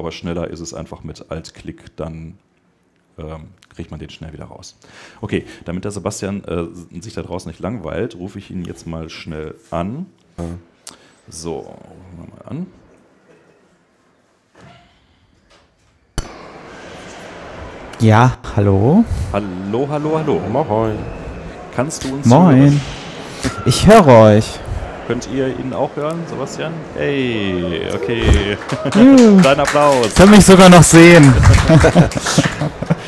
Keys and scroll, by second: 5.1 super+Tab.